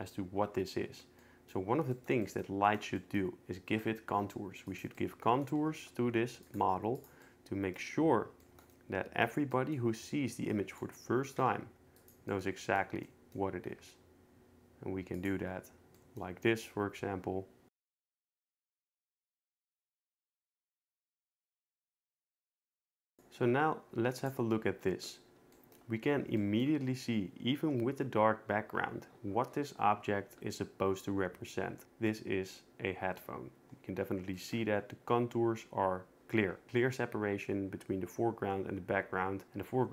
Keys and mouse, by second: 1.2 middle click, 2.2 middle click, 4.1 g, 4.7-5.8 drag, 5.8 r, 6.6 g, 8.4 shift+middle drag, 8.7 middle click, 11.4 shift+d, 13.8 g, 17.8 shift+Tab, 17.9-22.2 typing, 18.4 shift+Tab, 18.9 shift+Tab, 19.0 ctrl+z, 19.1 shift+Tab, 19.1 click, 19.7 shift+Tab, 19.9 shift+Tab, 20.9 shift+Tab, 21.1 alt+r, 22.4 shift+click, 22.7 shift+click, 22.8 shift+click, 23.0 shift+click, 24.2 click.